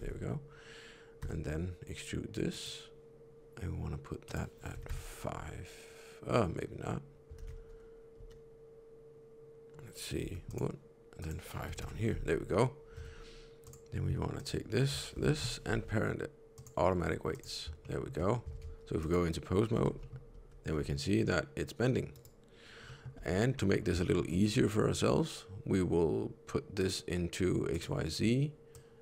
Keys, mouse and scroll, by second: 1.1 e, 4.2 click, 7.3 ctrl+z, 8.1 g, 11.1 click, 12.9 Tab, 13.5 click, 14.3 shift+click, 15.2 ctrl+p, 17.2 click, 17.8 shift+middle click, 18.5 ctrl+Tab, 18.9 click, 19.7 n, 19.9 middle click, 20.2 r, 22.8 middle click, 23.1 n, 23.5 middle click, 24.0 shift+middle click, 24.2 middle click, 26.7 click, 28.6 click.